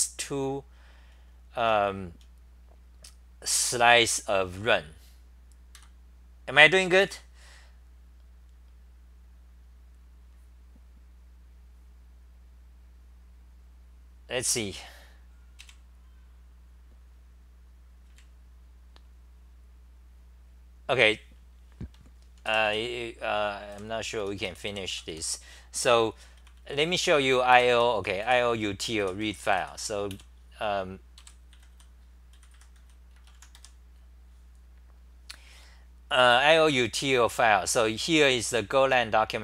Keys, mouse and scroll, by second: 1.1-1.7 t, 1.9 t, 2.1 t, 5.7 ctrl+g, 23.9-32.5 typing, 33.6 r.